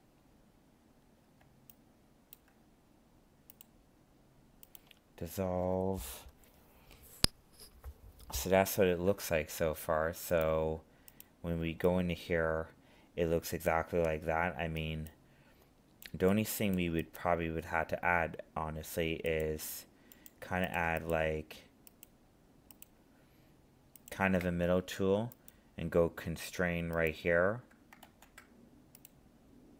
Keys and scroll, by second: 28.0 ctrl+z.